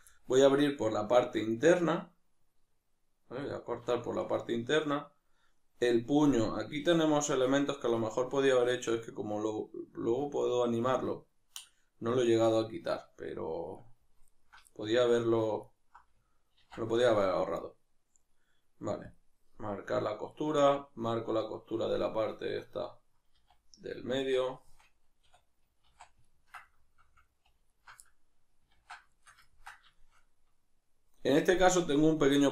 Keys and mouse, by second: 0.1-1.2 middle drag, 1.2 alt+right click, 1.6-14.3 middle drag, 14.3 alt+shift+right click, 14.7-15.6 middle drag, 15.6-16.5 alt+right drag, 16.5 ctrl+e, 20.3 right drag, 20.6-22.3 middle drag, 22.3 ctrl+right click, 23.3 z, 23.9-27.7 middle drag, 24.1 z, 25.3 \, 25.9 z, 27.7 alt+shift+right click, 28.1-29.1 middle drag, 28.8 ctrl+z, 29.1 shift+right click, 29.5-32.5 ctrl+middle drag.